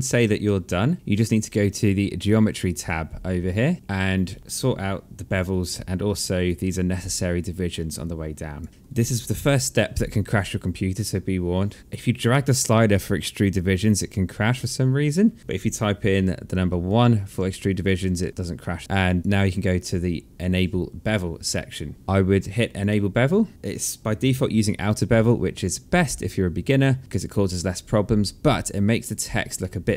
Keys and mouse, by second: 1.7 click, 5.1 alt+click, 7.5 alt+click, 8.3 alt+middle click, 8.7 alt+click, 13.9 click, 16.0 KP_1, 16.8 KP_Enter, 18.8 click, 22.2 click, 27.9 alt+click, 29.1 alt+middle click.